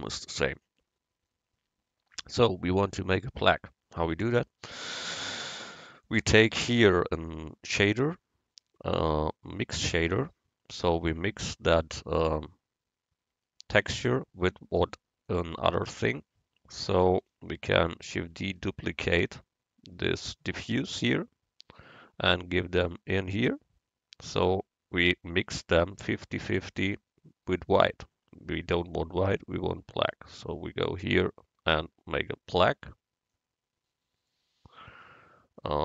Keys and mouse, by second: 0.6-2.3 drag, 6.0-7.6 drag, 15.4-17.2 drag, 18.4 shift+d, 22.0-23.8 drag, 28.7-30.5 drag.